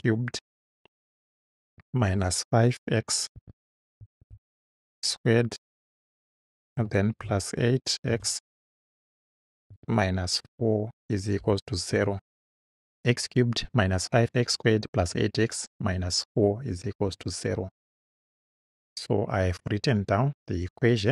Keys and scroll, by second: 1.6 -, 2.0 5, 3.4-4.7 typing, 5.7 2, 7.2 8, 8.2 x, 9.7 -, 10.4 4, 11.4 =, 12.0 0.